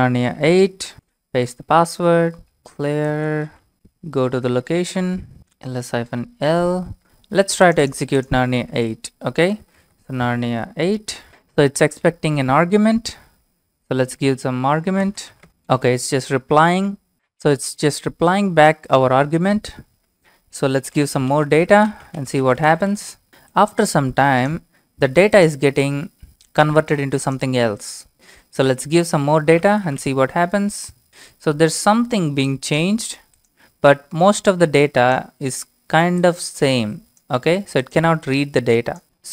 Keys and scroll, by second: 0.9 ctrl+v, 1.4 Return, 2.3-4.0 typing, 4.4 Tab, 5.0 Return, 5.1-6.7 typing, 9.3-10.9 typing, 15.0-15.8 typing, 20.9-23.1 typing, 23.1 Return, 29.3-30.5 typing.